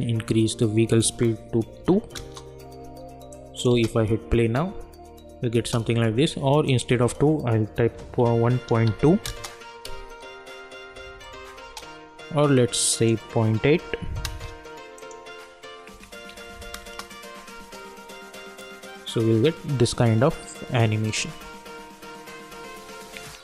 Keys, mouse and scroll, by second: 2.2 Return, 3.3 click, 3.7 space, 6.7 click, 9.2 Return, 10.0 space, 12.9 click, 14.3 Return, 14.9 click, 16.8 Return, 17.6 space, 22.4 space.